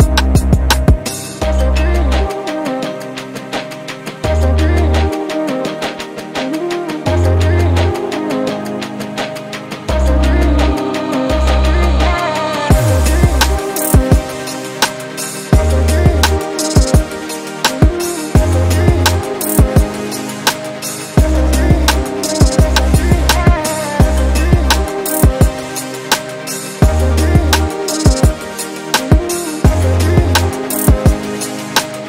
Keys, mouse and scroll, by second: 2.6 ctrl+z, 3.1 g, 4.8 alt+click, 5.3 g, 7.1 Tab, 7.6 click, 7.7 scroll down 8, 8.1-10.4 middle drag, 10.4 scroll up 5, 10.5 middle click, 11.2 scroll down 2, 11.4 KP_1, 12.0 click, 12.1 scroll up 4, 12.7-13.0 shift+middle drag, 13.0-13.4 scroll up 2, 13.4 Tab, 13.9 shift+middle click, 14.3 scroll down 1, 14.6-16.6 shift+middle drag, 16.6 alt+click, 17.1 g, 19.8 alt+click, 20.1 g, 22.9 alt+click, 23.3 g, 27.1 alt+click, 27.6 g, 29.8 Tab, 30.3-30.7 scroll down 1, 30.7 Tab, 31.4 shift+middle click, 31.8-32.0 scroll up 2.